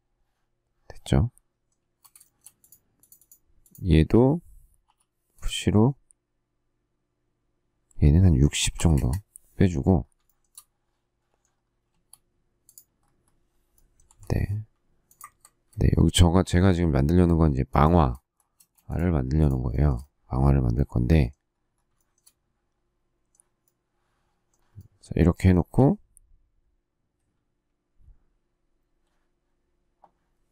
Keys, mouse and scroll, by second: 1.7 space, 2.2 shift+middle click, 4.8 p, 8.3-9.2 typing, 10.2 shift+middle click, 11.8 space, 14.0 m, 17.6 shift+click, 18.5 space, 19.6 shift+middle click, 21.9 shift+middle click, 25.3 shift+middle click.